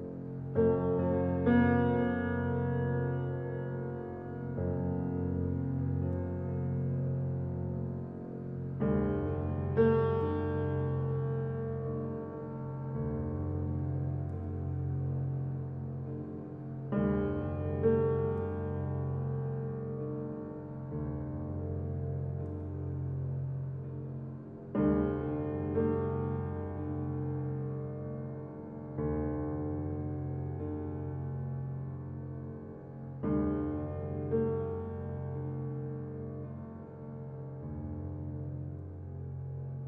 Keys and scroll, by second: 36.9 ctrl+t.